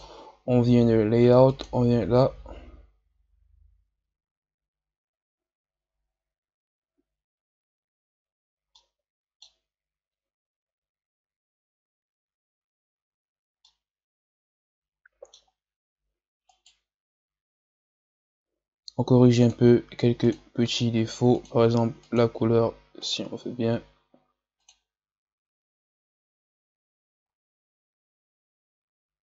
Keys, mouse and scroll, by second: 1.8 click, 8.2-8.6 scroll down 2, 8.6-12.2 middle drag, 13.6-16.4 middle drag, 16.4 right click, 19.4 click, 20.2-23.1 drag, 27.1-27.5 scroll up 3.